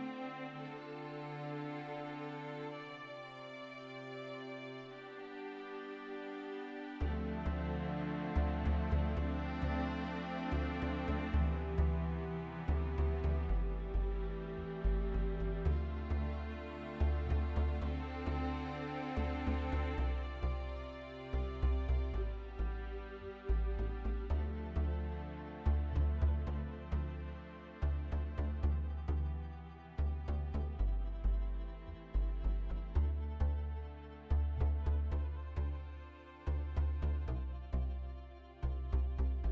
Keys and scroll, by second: 4.1 shift+z, 7.4 Tab, 9.2 Tab, 10.0 ctrl+a, 12.1 Tab, 13.6 shift+z, 28.8 KP_1, 37.3 shift+z.